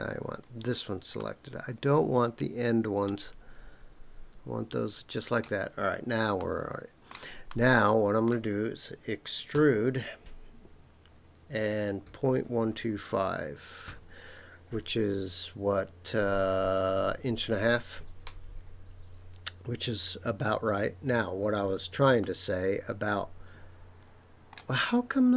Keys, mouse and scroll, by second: 1.1-5.3 middle drag, 6.4 shift+middle click, 7.5 middle click, 9.5 e, 12.0 KP_Decimal, 12.4 KP_1, 12.7 KP_2, 13.0 KP_5, 13.8 KP_Enter, 22.2-24.6 middle drag.